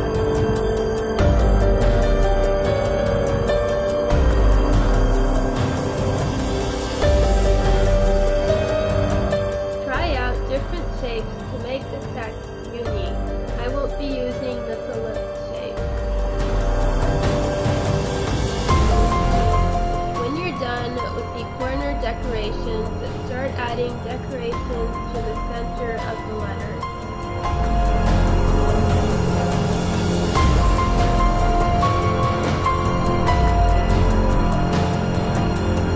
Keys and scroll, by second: 1.3 space, 2.4 space, 3.2 space, 11.7 space, 11.9 space, 12.9 Delete, 14.1 space, 14.4 space, 17.5 2, 19.3 space, 20.7 space, 22.2 space, 22.6 space, 22.9 space, 25.1 space, 25.4 space, 25.7 space, 27.5 space, 27.7 space, 32.1 space, 32.3 space, 35.1 space.